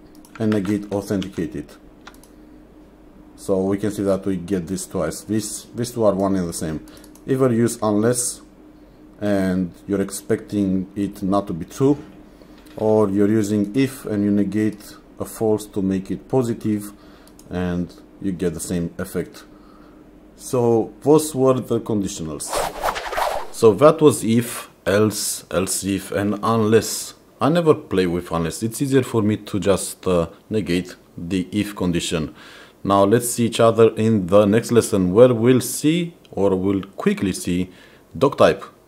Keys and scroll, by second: 0.6 shift+1, 1.3 ctrl+s.